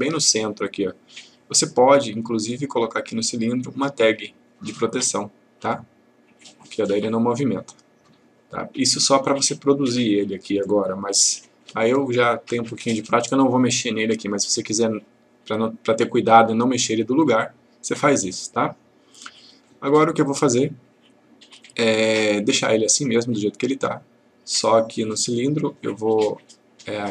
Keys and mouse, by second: 3.1 right click, 6.4 click, 10.3 click, 11.6 Delete, 18.4-19.7 click, 25.1 click.